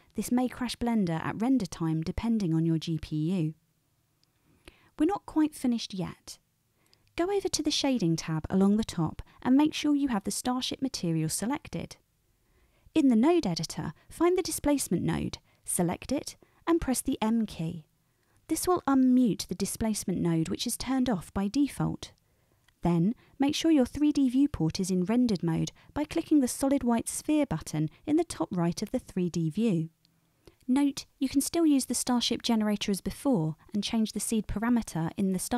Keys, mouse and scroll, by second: 8.6-14.8 middle drag, 14.8 click, 14.9-29.2 middle drag, 16.2 m, 29.2-31.2 drag, 31.2-32.3 middle drag, 32.3-33.4 drag, 33.4-35.0 middle drag, 35.0 click.